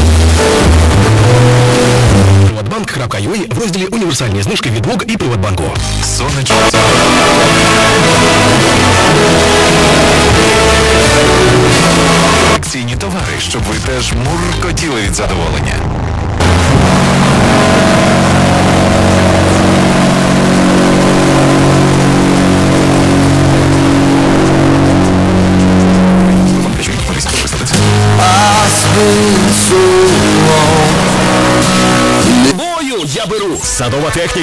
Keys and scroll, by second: 2.5 Page_Down, 12.5 Page_Down, 32.8 Page_Down.